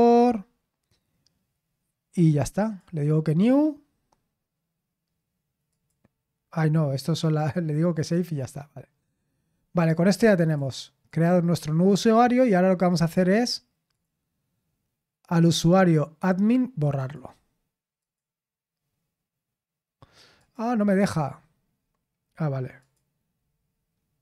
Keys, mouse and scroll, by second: 0.3-2.6 scroll down 1, 2.6 click, 5.7 click, 6.7-7.3 scroll down 2, 7.3 click, 10.4 click, 11.1 click, 13.9 click, 15.2-16.9 scroll down 1, 16.9 click, 18.0 click, 20.3 click, 20.8-21.9 scroll up 2, 21.9-22.8 scroll down 1, 22.8 click, 23.4-24.2 scroll down 2.